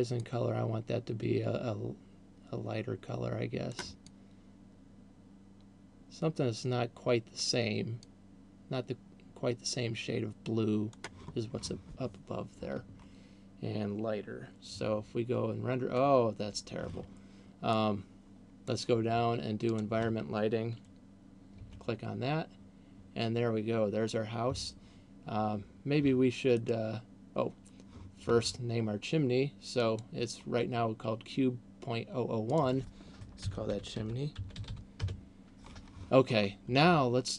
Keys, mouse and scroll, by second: 17.0 Escape, 18.0 click, 20.0 click, 25.0 Escape, 25.7 scroll down 1, 27.0 right click, 30.0 click, 32.7 click.